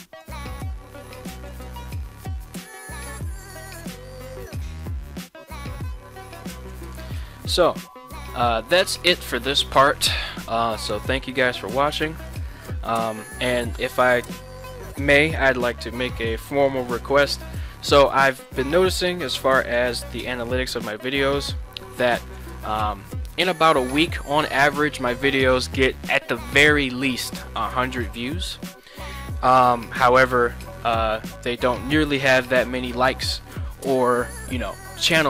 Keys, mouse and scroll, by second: 0.3 right click, 0.5 g, 2.5 right click, 3.4 right click, 3.6 g, 6.4 right drag, 6.9-7.4 middle drag, 11.1-11.4 middle drag.